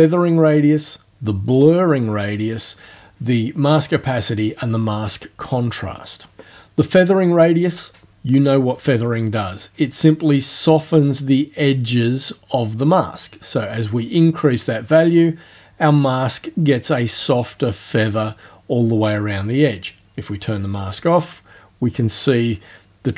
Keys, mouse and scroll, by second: 10.1-19.9 drag, 20.8 click.